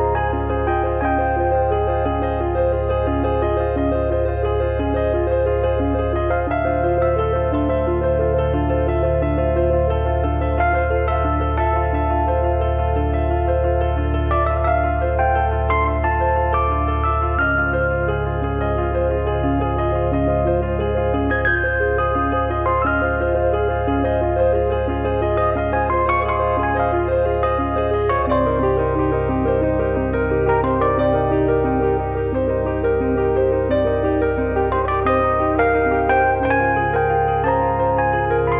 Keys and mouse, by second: 1.8 click, 2.7 click, 3.1 click, 4.1 shift+middle click, 5.2 middle click, 5.7 KP_3, 6.2 middle click, 6.5 shift+middle click, 6.8 middle click, 7.1 shift+middle click, 7.7 alt+z, 10.0 click, 11.3 click, 12.1 click, 12.8 click, 13.4 click, 13.7 middle click, 14.6 middle click, 15.4 middle click, 17.5 click, 17.7 middle click, 18.4 middle click, 21.9 shift+middle click, 22.3 click, 24.0 click, 26.0 click, 27.4 click, 27.6 middle click, 28.2 shift+middle click, 28.7 shift+middle click, 29.1 middle click, 29.6 shift+middle click, 30.1 shift+middle click, 30.3 middle click, 30.7 middle click, 34.2 click, 34.7 click, 37.9 click, 37.9 middle click.